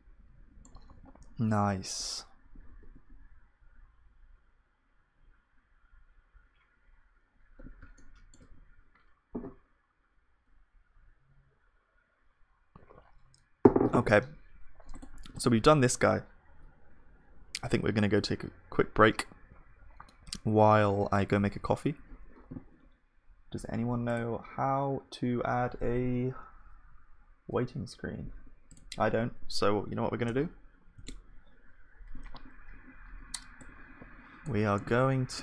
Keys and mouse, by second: 0.9 ctrl+s, 1.3 KP_1, 2.8 Tab, 8.0-12.8 middle drag, 15.2-33.9 drag.